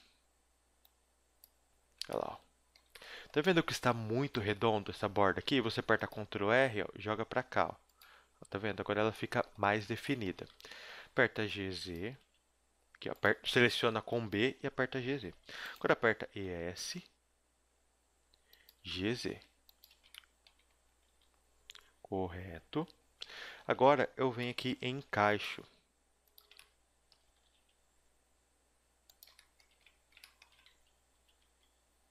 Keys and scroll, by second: 2.0 Tab, 4.9 Tab, 5.3 a, 5.8 ctrl+r, 8.0 Tab, 9.8 Tab, 10.5 z, 11.0 a, 11.2 b, 12.0 g, 13.7-16.2 typing, 18.8 g, 19.8 z, 21.0 a, 22.7-27.4 typing, 30.7 z, 31.2 z, 31.4 s.